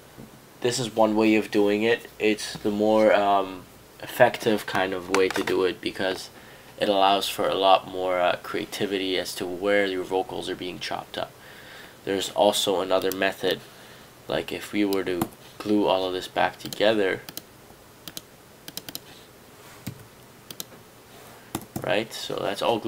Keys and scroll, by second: 15.3 Escape, 19.9 m, 21.6 Escape, 21.8 Escape.